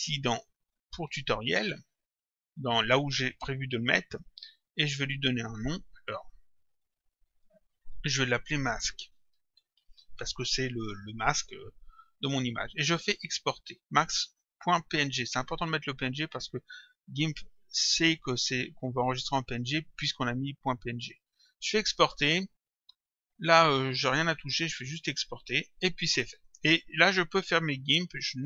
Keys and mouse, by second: 4.9 click, 6.2 Left, 7.5 shift+Home, 9.2-10.2 typing, 21.5 click, 23.4 click, 24.7 click, 27.8 click.